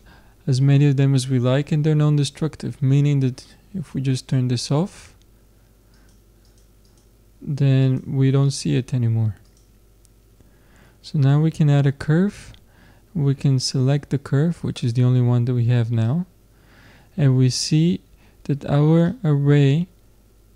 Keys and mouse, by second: 4.2-11.2 drag, 13.6-15.5 drag, 16.1 middle click, 19.1 middle click.